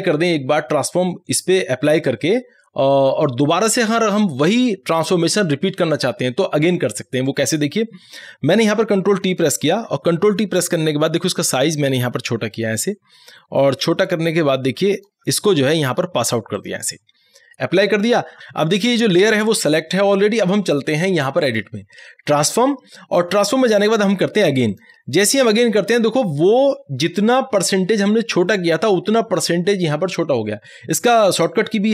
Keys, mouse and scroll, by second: 9.7 ctrl+t, 11.8-16.6 drag, 21.5 click, 24.7 click.